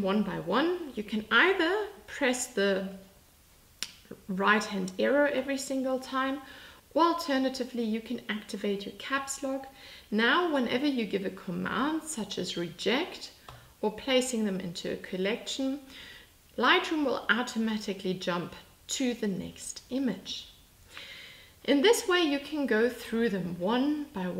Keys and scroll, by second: 3.5 Right, 4.3 Right, 5.4 Right, 8.1 Caps_Lock.